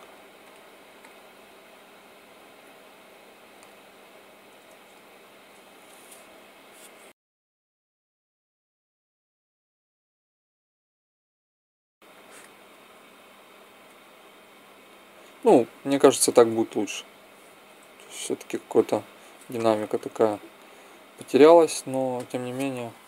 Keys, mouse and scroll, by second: 0.3-2.3 drag, 3.4 a, 6.0 g, 8.8 click, 12.1 click, 13.8 alt+a, 15.5 Escape, 16.2 alt+a, 17.4 Escape, 17.9 alt+a, 19.4 Escape, 19.9 alt+a, 21.2 Escape, 21.9 alt+a.